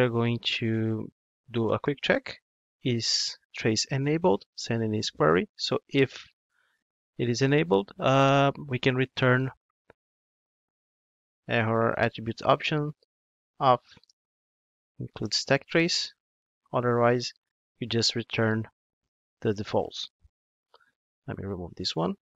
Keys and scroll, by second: 2.8 Return, 12.1 Return, 20.6 super+1.